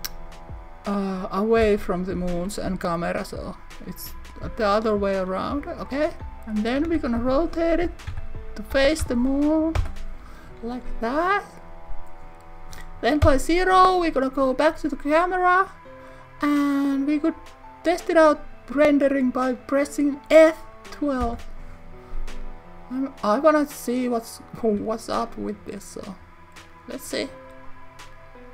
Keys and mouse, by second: 1.6 Return, 7.2 x, 8.1 2, 8.8 7, 9.0 0, 9.8 Return, 13.2 KP_0.